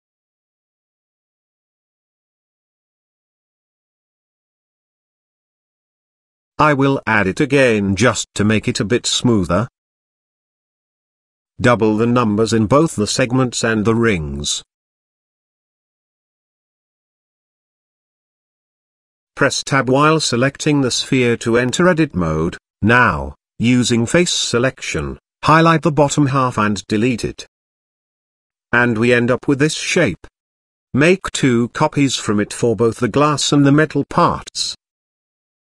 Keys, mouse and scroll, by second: 1.4-2.0 scroll down 1, 2.1-2.4 shift+middle drag, 4.9-5.8 scroll down 4, 5.9 a, 6.2 x, 7.0 shift+a, 10.8 click, 12.9-14.5 drag, 14.8-16.1 drag, 16.8-17.3 scroll up 4, 17.3-17.8 shift+middle drag, 17.9-19.6 scroll up 2, 19.6 Tab, 21.3 click, 22.1 z, 24.4-26.3 drag, 27.9 x, 29.3 middle click, 30.0-30.5 scroll down 2, 30.2 z, 31.2-33.4 middle drag, 34.7 Tab.